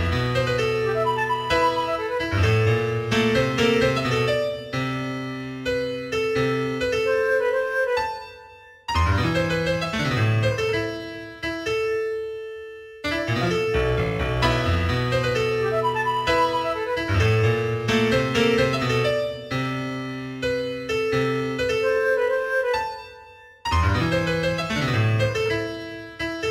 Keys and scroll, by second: 0.6 g, 2.4 g, 5.1 g, 5.6 g, 8.1 g, 8.9 g, 9.6 g, 11.0 g, 12.0 g, 12.6 g, 13.2 g, 15.1 g, 16.2 g, 18.5 g, 20.4 g, 23.3 g.